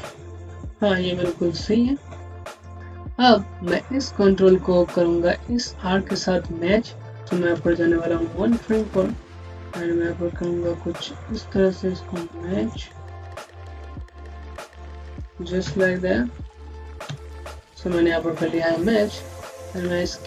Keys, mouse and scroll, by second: 0.7 scroll down 1, 0.9 typing, 1.2-2.3 scroll down 1, 2.3 click, 2.8-3.6 scroll down 1, 3.6 click, 6.7 scroll up 1, 8.5 click, 10.6-11.2 scroll up 1, 11.2 click, 15.5 Up, 16.9 Left, 17.8 scroll down 1, 18.6 scroll up 1, 20.0 click.